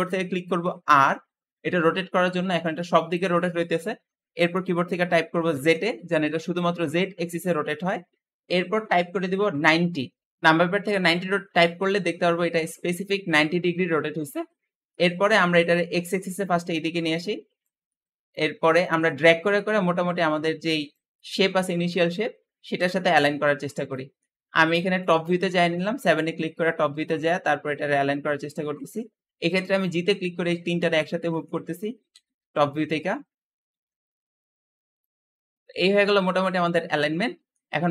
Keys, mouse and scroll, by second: 0.7 r, 11.9 scroll down 1, 12.1-13.2 middle drag, 13.2 scroll up 4, 14.1-14.7 scroll up 3, 14.7-15.9 middle drag, 15.9 click, 17.7 middle click, 18.4 scroll down 1, 18.7-19.9 shift+middle drag, 19.9 click, 21.0-22.6 middle drag, 22.6 KP_7, 23.8 shift+middle click, 24.2-24.6 scroll up 1, 24.6 shift+middle click, 25.0-25.4 scroll up 1, 25.4 shift+middle click, 25.9 g, 29.7-30.1 scroll down 1, 30.1-31.9 middle drag, 31.9 KP_7, 32.5-33.5 scroll up 8, 33.5 g, 35.0 scroll down 1, 35.1-35.5 scroll up 1, 35.5 scroll down 3, 35.7-37.9 middle drag.